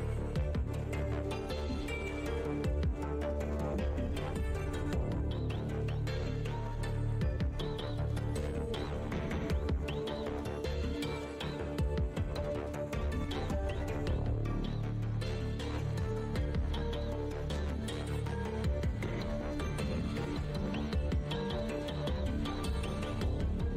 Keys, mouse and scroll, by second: 4.3 click, 5.1 click, 6.8 click, 6.9 Tab, 8.9 click, 11.7 click, 14.9 click, 15.1 6, 15.8 scroll down 1, 17.2 click, 18.3 ctrl+Tab, 19.2 click, 19.8 Tab, 20.5 click, 22.1 ctrl+Tab, 23.0 click.